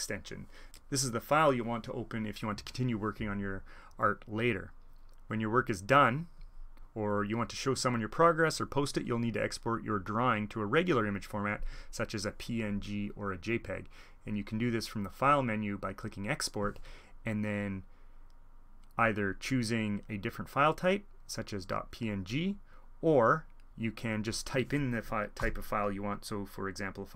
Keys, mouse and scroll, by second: 6.3-8.4 drag, 13.9-15.4 drag, 15.7-16.3 drag, 18.9-22.0 drag, 23.6-24.6 drag, 25.4 ..